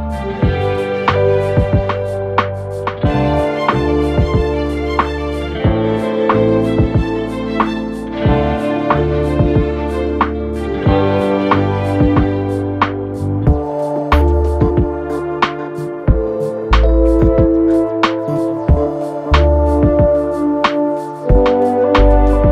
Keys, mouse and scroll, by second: 10.4 Right, 10.6 Right, 10.7 Right, 10.9 Right, 11.0 Right, 11.3 Right, 11.7 Right, 12.7 Right, 14.4 ctrl+z, 16.1 Left, 16.3 Left, 16.7 Left.